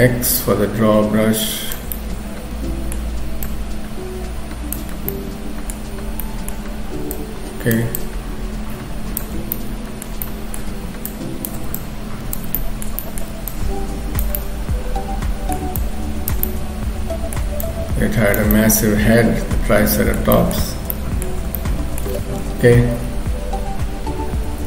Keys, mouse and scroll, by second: 0.4 click, 2.0 middle click, 3.2 scroll up 1, 3.5 click, 4.9-5.6 scroll down 3, 5.1 middle click, 5.9 scroll up 2, 6.2 middle click, 7.2 click, 8.0 click, 9.4 scroll down 3, 9.6 middle click, 10.2 middle click, 11.8 shift+click, 12.6 middle click, 13.0 shift+middle click, 13.5 shift+click, 14.4 middle click, 15.8 click, 16.4 middle click, 17.6 shift+click, 18.6 middle click, 20.4 shift+middle click, 20.7 scroll up 2, 20.9 middle click, 21.6 shift+middle click, 23.0 x, 24.3 x.